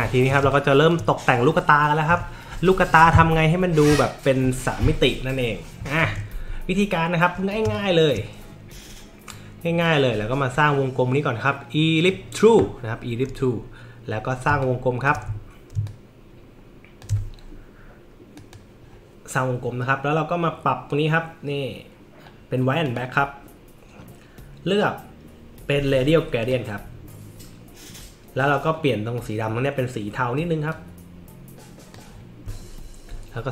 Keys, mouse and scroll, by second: 0.1 alt+scroll up 1, 0.4 space, 0.5 click, 7.6 space, 7.7 click, 9.8-12.1 drag, 14.5 space, 14.6 click, 15.4 alt+middle click, 15.4 alt+scroll up 1, 15.9-17.0 alt+shift+drag, 18.3 click, 22.8 click, 26.4 click, 30.7-31.9 drag, 32.6 alt+middle click, 32.6-33.0 alt+scroll up 1.